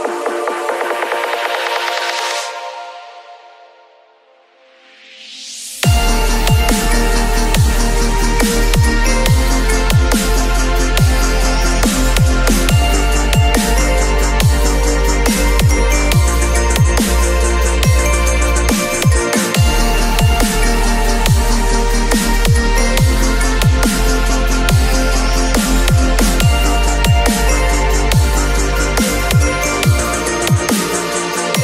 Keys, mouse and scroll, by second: 6.5 n, 6.7 space, 15.9 space, 24.7 space.